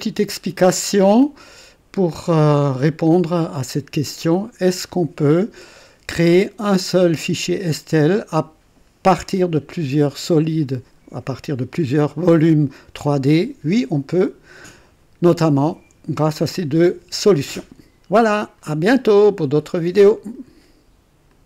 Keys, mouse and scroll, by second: 1.4 click, 3.3 click, 19.7 right click, 21.3 click.